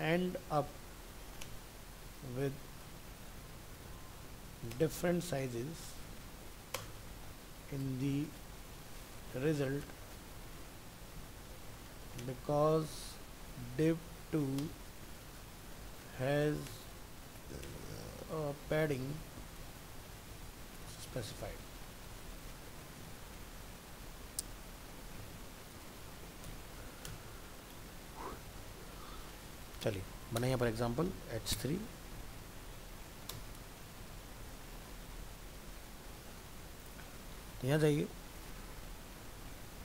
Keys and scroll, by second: 29.1 ctrl+s, 33.7 ctrl+s.